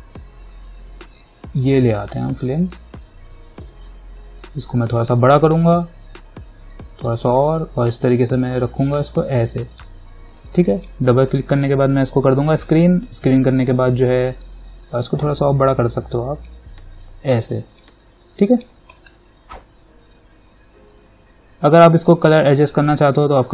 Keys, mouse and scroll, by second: 2.0-4.4 drag, 4.4-10.6 alt+drag, 15.8 ctrl+t, 16.9-19.1 alt+drag.